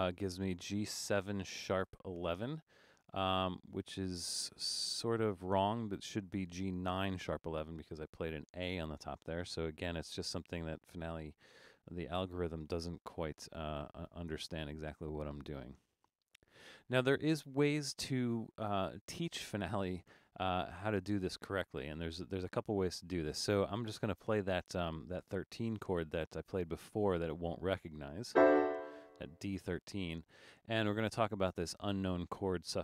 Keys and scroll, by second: 13.6 BackSpace, 14.3 BackSpace.